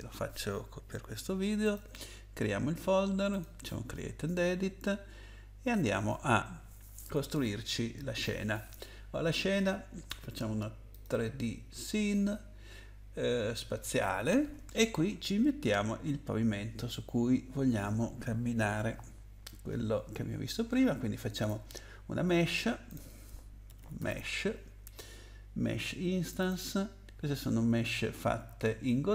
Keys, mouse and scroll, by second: 1.6 click, 3.3 click, 10.9 click, 21.3 click, 22.9 click, 23.4-24.9 typing, 26.3 click, 26.5 click.